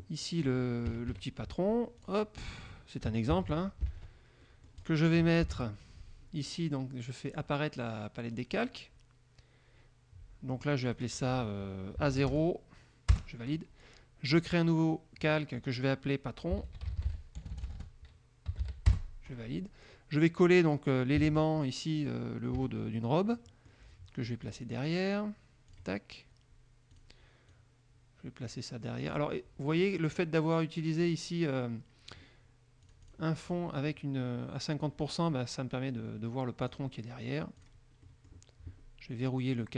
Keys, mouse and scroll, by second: 0.0 click, 0.3 middle click, 0.5 click, 1.1 KP_Subtract, 2.1 click, 3.5 ctrl+c, 4.2 alt+Tab, 4.6 alt+click, 5.6 ctrl+shift+l, 7.5 click, 8.5 click, 11.0 click, 12.3 shift+a, 12.5 shift+KP_0, 13.3 Return, 14.5 click, 16.5-19.4 typing, 20.3 click, 21.5 ctrl+v, 22.7 KP_Subtract, 23.5 click, 24.6 click, 25.9 click, 27.1 click, 27.7-29.5 drag, 29.9 click, 31.2 middle click, 33.0 click, 33.6 click, 36.8 click, 37.7 click, 38.2 middle click, 38.6-39.7 scroll up 1.